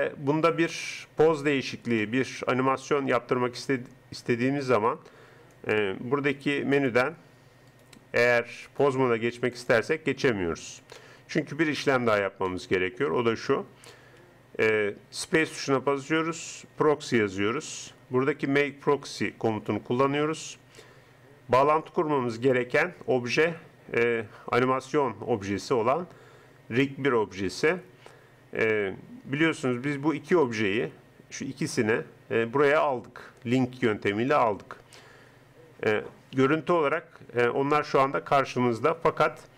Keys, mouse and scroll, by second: 5.5 click, 6.6 click, 7.5 middle click, 7.7-9.5 drag, 10.5 click, 12.9-14.1 drag, 15.3 space.